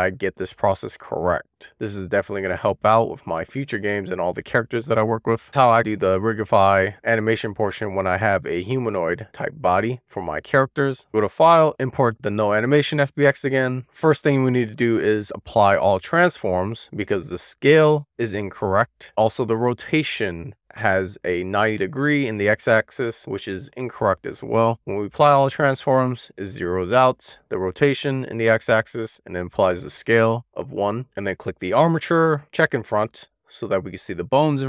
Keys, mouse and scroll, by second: 4.6 super+s, 5.4-6.7 shift+middle drag, 7.3-9.2 middle drag, 9.8-10.9 shift+middle drag, 11.4-12.4 drag, 13.6-14.6 shift+middle drag, 17.4 ctrl+a, 30.9-31.7 shift+middle drag, 32.3 click, 33.6 click, 34.2 shift+middle click.